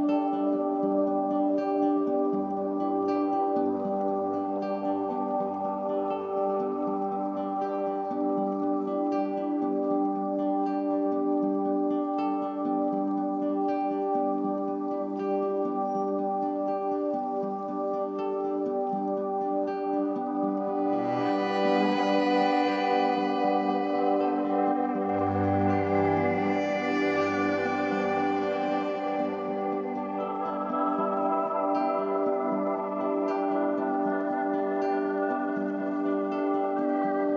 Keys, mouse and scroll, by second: 11.6 F9, 11.8 click, 19.1-31.8 drag, 35.1-37.3 drag.